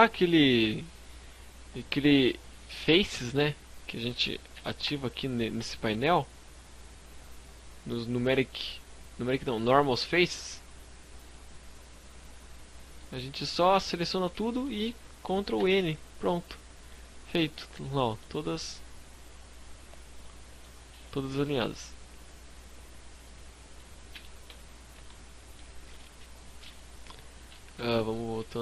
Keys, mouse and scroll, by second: 3.6 n, 3.8 Tab, 4.6 Tab, 5.4-5.8 scroll down 4, 5.7 scroll up 2, 6.4 scroll up 2, 8.2 scroll up 2, 10.1 click, 11.7 scroll up 3, 12.0 middle click, 12.4-12.9 scroll down 3, 13.0 a, 13.3 shift+middle click, 14.5 ctrl+n, 16.7 click, 17.1 scroll up 1, 17.2 middle click, 17.7-18.2 scroll up 1, 18.4 scroll down 1, 19.2 middle click, 22.2 click, 23.0 n, 23.3 Tab, 23.6 scroll down 4, 23.8 a, 23.9 middle click, 24.4-25.0 scroll up 2, 24.9 middle click, 26.7 KP_1, 27.0 KP_5, 27.4 KP_3, 28.3 scroll up 4.